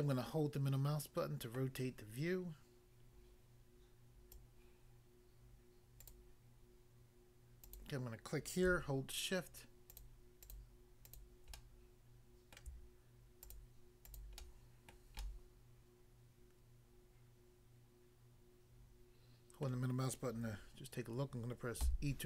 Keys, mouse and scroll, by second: 0.0 middle click, 1.6 middle click, 4.3 click, 4.4 click, 6.0 click, 7.7 click, 9.9 shift+click, 10.4 shift+click, 11.1 shift+click, 11.5 middle click, 12.6 middle click, 13.4 shift+click, 14.1 shift+click, 14.4 shift+middle click, 14.9 shift+middle click, 15.2 shift+middle click, 19.7 middle click, 21.8 e.